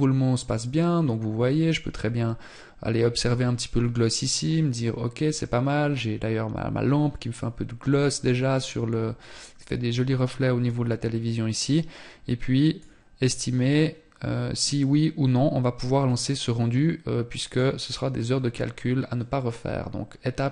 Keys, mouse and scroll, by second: 9.8 click, 14.0 click.